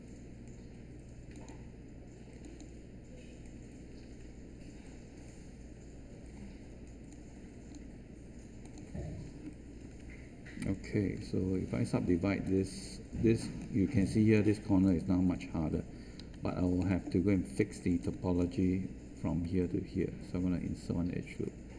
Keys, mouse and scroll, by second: 11.1 3, 16.1 1.